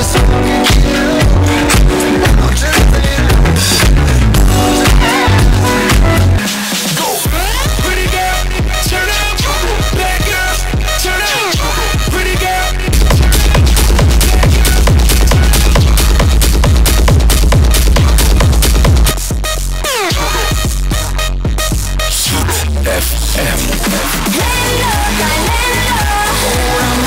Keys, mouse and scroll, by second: 6.4 Page_Down, 19.1 Page_Down.